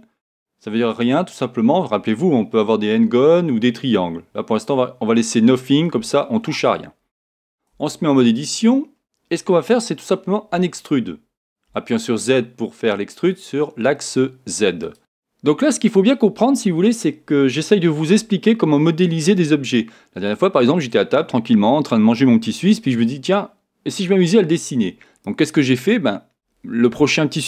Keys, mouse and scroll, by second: 1.0 click, 7.7 Tab, 8.3 scroll up 1, 9.2-10.5 scroll up 1, 10.5 e, 14.5 click, 15.0-27.4 middle drag.